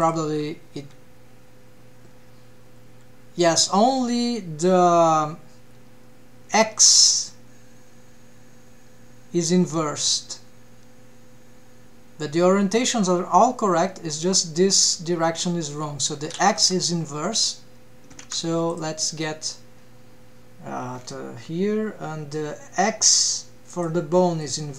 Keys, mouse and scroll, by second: 0.0 click, 0.8 g, 18.3 ctrl+Tab, 18.7 click, 20.9-21.7 scroll down 3, 23.7 click.